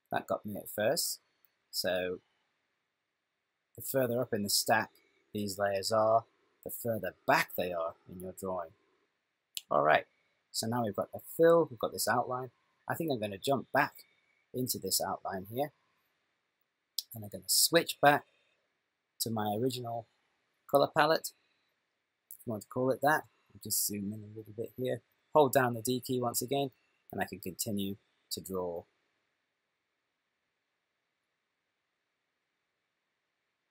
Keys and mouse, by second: 15.5 click, 18.7 click, 23.6 ctrl+middle click, 26.1-27.0 d, 27.2 click, 27.2 d.